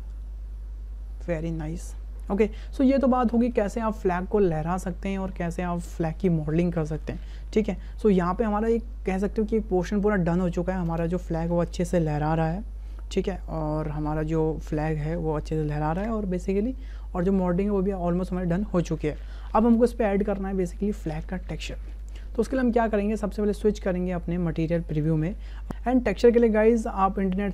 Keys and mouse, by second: 4.0 space, 7.6 click, 10.9 space, 19.6 space, 21.9 click, 25.0 click.